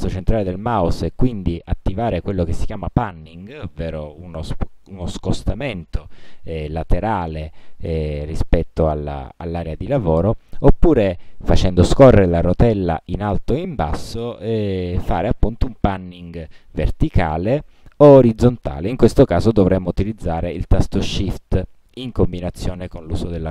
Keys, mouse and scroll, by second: 0.2-8.5 middle drag, 11.0-11.5 scroll up 2, 11.7-12.0 scroll down 1, 12.2-12.5 scroll down 1, 12.9-13.7 scroll up 2, 14.0 scroll down 2, 14.5 scroll down 1, 17.1 scroll down 1, 17.8 scroll down 2, 21.1-21.5 shift+scroll down 2, 21.7-22.4 shift+scroll up 4, 22.8 shift+scroll down 1, 23.2-23.5 shift+scroll up 5.